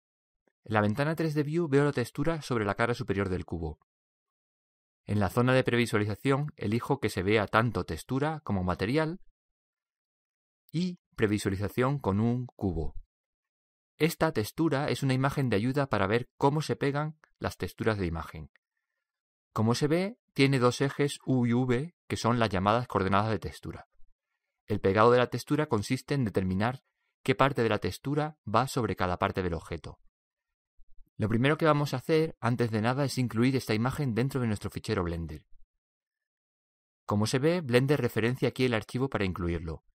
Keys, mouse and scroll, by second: 1.7-4.1 middle drag, 4.1 scroll up 1, 4.4-9.5 middle drag, 9.5-11.4 drag, 10.7-12.4 middle drag, 12.5 middle click, 12.7-15.4 drag, 13.8-16.0 middle drag, 22.4-24.9 middle drag, 33.4-35.7 middle drag, 35.4-37.2 drag.